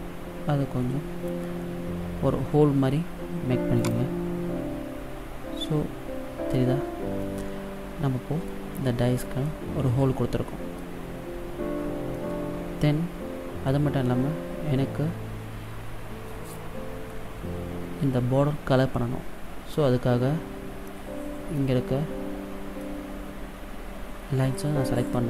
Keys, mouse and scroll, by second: 5.0-5.8 scroll up 4, 5.8 middle click, 7.4 middle click, 9.0 scroll down 1, 9.6 middle click, 11.3 scroll down 2, 12.3 middle click, 14.1-14.5 scroll up 1, 20.8-21.7 scroll up 2, 21.7 middle click.